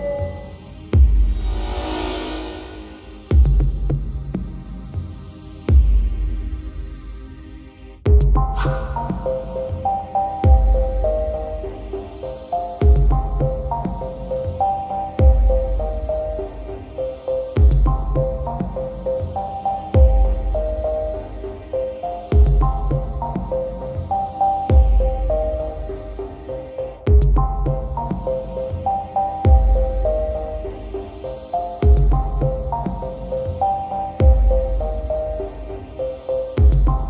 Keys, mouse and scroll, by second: 0.8 click, 1.2 KP_3, 2.2 s, 2.3 z, 4.0 click, 5.3 g, 5.4 z, 6.1 click, 7.6 x, 8.4 click, 9.4 s, 9.5 x, 11.5 click, 12.3 s, 12.5 y, 13.3 click, 14.0 s, 14.1 y, 16.8 click, 17.8 ctrl+a, 19.2 Tab, 20.2 ctrl+r, 21.7 click, 22.4 s, 22.6 x, 24.7 click, 26.2 ctrl+r, 27.7 click, 28.6 s, 28.7 x, 29.2 click, 29.9 ctrl+r, 32.0 click, 33.5 3, 34.5 alt+click, 35.3 shift+click, 35.7 shift+click, 36.4 shift+click, 36.9 shift+click.